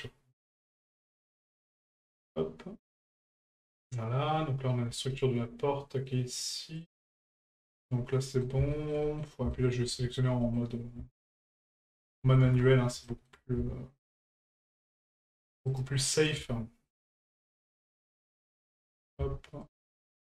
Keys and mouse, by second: 8.1-8.4 middle drag, 8.7 shift+middle drag, 9.0 middle click, 9.5 shift+middle drag, 10.4 middle click, 11.6 shift+right click, 13.0 shift+middle drag, 14.2 shift+right click, 15.0 ctrl+right click, 15.7 shift+right click, 15.9-16.2 middle drag, 16.9 ctrl+right click, 17.4 shift+middle drag, 17.8 middle drag, 18.8 shift+right click, 19.6 ctrl+right click, 20.0 shift+middle drag.